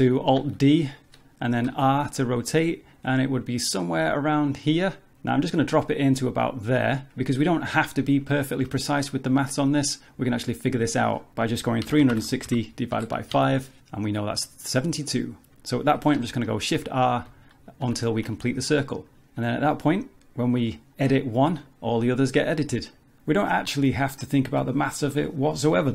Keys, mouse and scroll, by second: 0.4 alt+d, 10.3 click, 16.8 shift+r, 17.3 shift+r, 17.9 shift+r, 18.8 middle click, 19.4 Tab, 19.7 middle click, 20.1 click, 20.7 click, 21.1 click, 21.6 click, 21.9 middle click, 24.8 click.